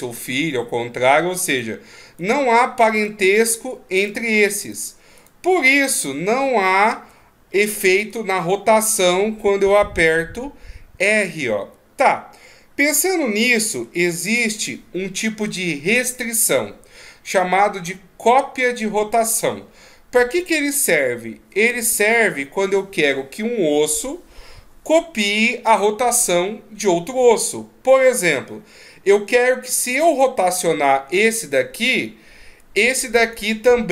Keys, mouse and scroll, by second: 1.5 right click, 2.2 right click, 2.9 right click, 3.5 right click, 4.0 right click, 4.6 right click, 5.2 right click, 8.0 r, 12.8 middle click, 29.9 r, 33.2 right click.